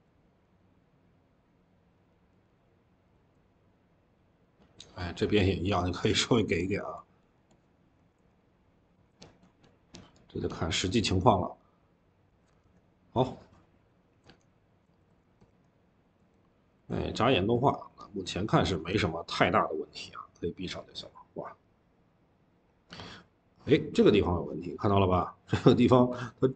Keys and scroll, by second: 0.0-0.5 typing, 12.5 Escape, 14.1 Escape, 14.9 ctrl+s, 16.6-18.4 typing, 18.8 Escape.